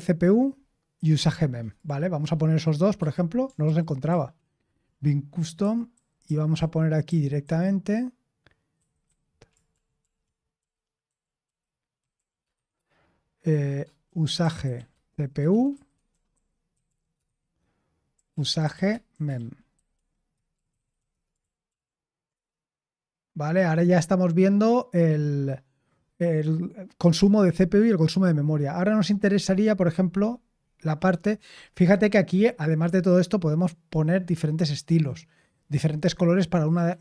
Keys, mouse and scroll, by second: 0.5-1.3 scroll down 1, 1.3-2.9 scroll down 1, 2.9 q, 3.6 ctrl+p, 4.0 ctrl+p, 4.7 Return, 5.5-7.0 typing, 8.7-22.8 typing, 31.8-34.1 scroll down 1, 34.1-36.9 scroll down 1, 36.9-37.0 scroll down 1.